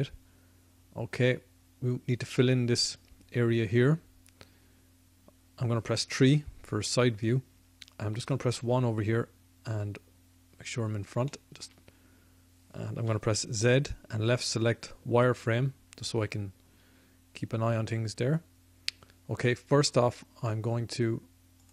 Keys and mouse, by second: 6.2 KP_3, 8.5 KP_1, 9.7 middle click, 10.8 middle click, 12.0-13.8 middle drag, 13.0 z, 21.6-21.7 drag.